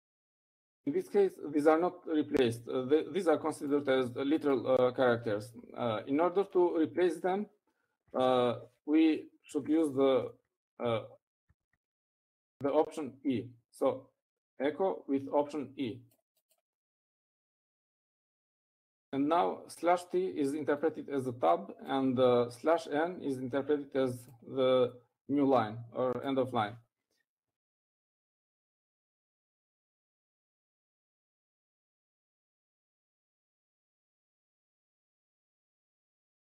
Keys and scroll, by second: 7.3 Up, 7.8 Left, 8.2 Left, 9.3 -, 11.2 typing, 31.1-33.3 typing.